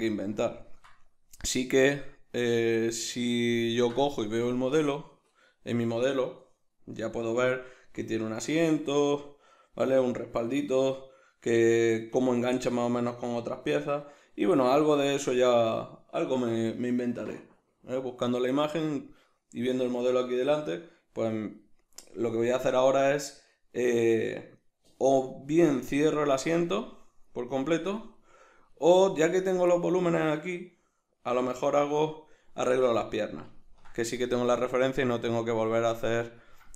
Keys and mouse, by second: 21.6-22.1 middle drag, 22.5-29.3 shift+middle drag, 29.3-29.7 right drag, 29.7-36.7 middle drag.